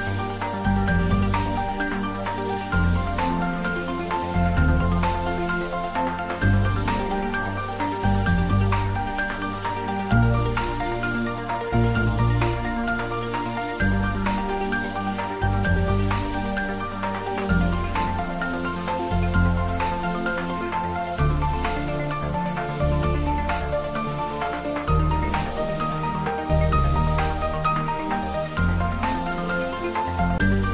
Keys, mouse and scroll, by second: 0.1-1.1 scroll down 1, 1.1-1.5 scroll up 1, 1.5-2.1 middle click, 2.5-3.5 scroll up 1, 3.5 scroll down 1, 4.0-5.5 middle drag, 6.5 click, 7.9 scroll up 1, 8.1-8.7 scroll down 1, 8.7-9.6 middle drag, 10.3 click, 12.1-12.4 scroll up 1, 14.9-15.2 scroll up 1, 16.7 Tab, 17.3 click, 18.7 scroll up 1, 19.8 `, 20.6 click, 20.9 Tab, 21.6 click, 22.2 Tab, 23.1 click, 25.6 scroll down 1, 27.5 scroll up 1, 28.3-28.9 middle drag, 29.6 scroll up 1.